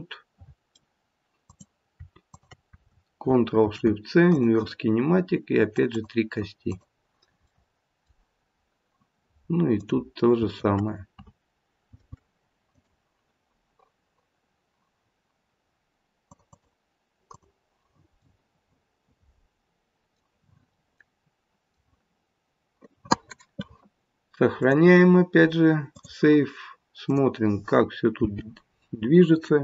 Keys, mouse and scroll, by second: 1.4 click, 2.3 shift+click, 3.5 ctrl+shift+c, 5.7 click, 5.9 click, 6.6 click, 7.4 middle click, 9.7 click, 11.8 ctrl+shift+c, 16.3 click, 17.2 click, 18.2 middle click, 21.1 middle click, 24.5 click, 27.0 click, 28.1 g.